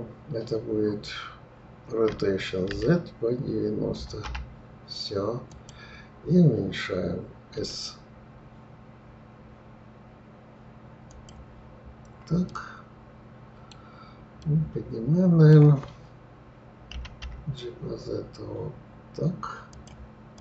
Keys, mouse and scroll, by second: 2.1 r, 7.5 s, 11.8 scroll up 2, 12.5-16.9 middle drag, 16.9 g, 20.3 click.